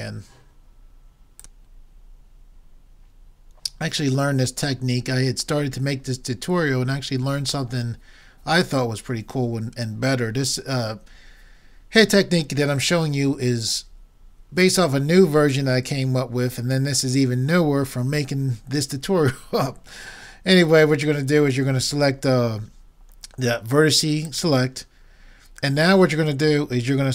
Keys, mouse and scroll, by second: 24.3-26.1 drag.